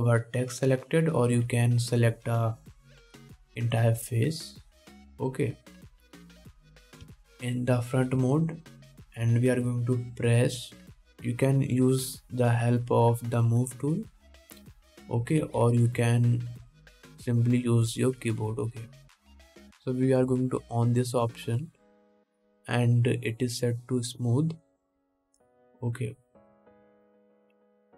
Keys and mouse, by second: 3.1 3, 4.2 c, 8.3 KP_1, 9.7-12.5 shift+middle drag, 12.5-21.0 drag, 16.6 ctrl+z, 21.0-23.4 middle drag, 23.4-27.9 drag.